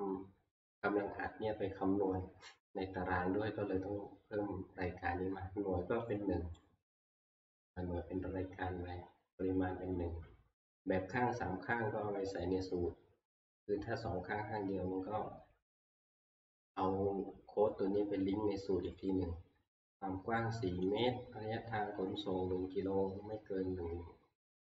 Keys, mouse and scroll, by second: 0.3-2.5 drag, 6.6 click, 19.0 click, 21.0 click.